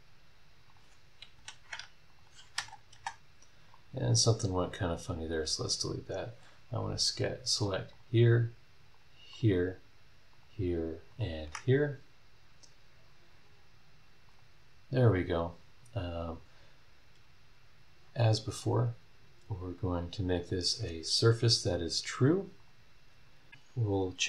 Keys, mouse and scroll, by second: 0.7 click, 1.3 Delete, 2.1 click, 2.5 space, 3.7 right click, 5.1 click, 5.5 scroll down 1, 5.9 scroll up 1, 6.8 scroll up 1, 7.9 ctrl+click, 8.9 ctrl+click, 9.3 ctrl+click, 10.3 ctrl+click, 11.1 ctrl+click, 11.7 ctrl+scroll down 1, 11.9 ctrl+middle click, 12.3 scroll down 2, 12.5 middle click, 12.7 scroll up 2, 12.9 middle click, 14.2 click, 15.4 scroll up 1, 18.0 scroll down 2, 18.5 click, 20.4 click, 21.7 click, 22.6 click.